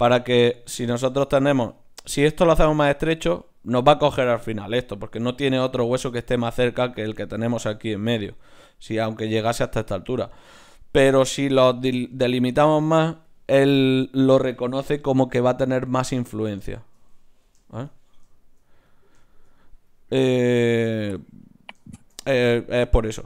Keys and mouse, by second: 5.8-15.0 drag, 16.3-21.5 middle drag, 20.4-23.2 right drag, 21.9-23.2 middle drag.